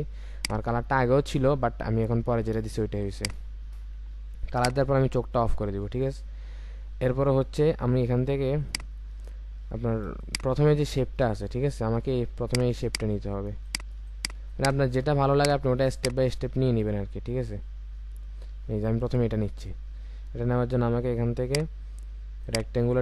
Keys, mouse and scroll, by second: 6.9-7.3 alt+scroll up 1, 9.1-9.8 alt+scroll up 2, 10.1 space, 11.3-12.6 alt+scroll up 2, 12.6 alt+scroll up 1, 12.7 space, 13.7 ctrl+click, 14.5 ctrl+click, 16.7-17.1 alt+scroll down 1, 17.7-18.2 alt+scroll down 1, 19.3-21.2 scroll up 1, 21.4 right click.